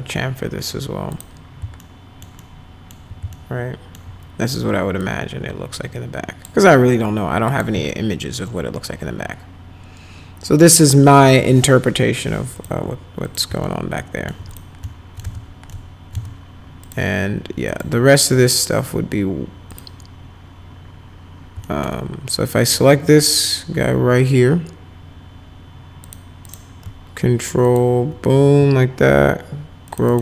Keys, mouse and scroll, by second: 1.1 click, 1.8 alt+middle click, 2.4 alt+middle click, 3.4 alt+middle click, 5.0-6.5 drag, 7.5 click, 7.9-10.6 alt+middle drag, 10.9 alt+middle click, 12.6 click, 13.3 click, 13.6 alt+middle click, 14.5 click, 14.9 alt+middle click, 15.2 z, 15.7 alt+middle click, 16.1 right click, 16.1 z, 16.8 click, 17.7 click, 19.7 click, 21.7 alt+middle click, 22.6 click, 26.0 click, 26.4 click, 27.7 ctrl+click, 29.9 click, 30.1 click.